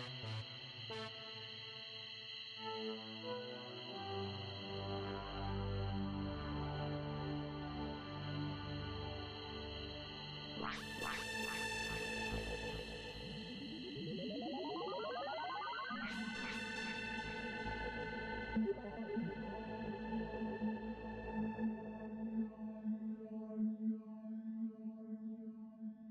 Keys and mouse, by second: 0.3 click, 2.2 click, 3.7-5.2 drag, 6.8 click, 8.4-10.8 drag, 12.5 click, 13.9 click, 16.4 click, 19.3 click, 24.1 click.